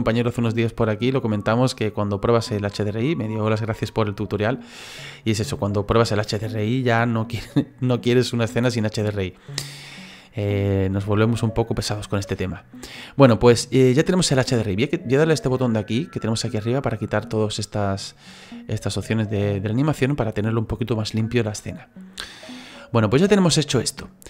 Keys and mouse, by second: 1.7 middle click, 5.4 middle click, 8.2 middle click, 12.4 middle click, 16.8 click, 17.4 click, 19.2 click, 21.5 middle click.